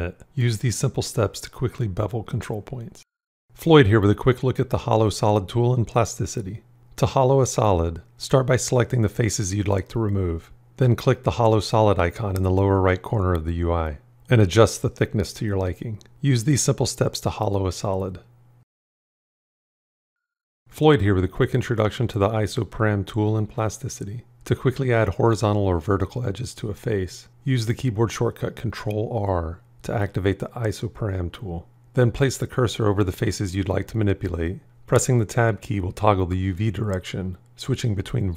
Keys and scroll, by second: 0.4 b, 27.7 ctrl+r, 33.4 Tab.